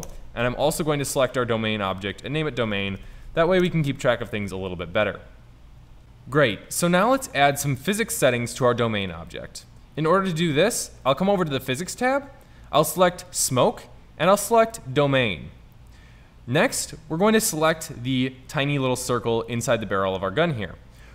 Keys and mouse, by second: 13.2-17.3 drag, 17.3 middle click, 17.7 middle click, 19.6-21.1 right drag.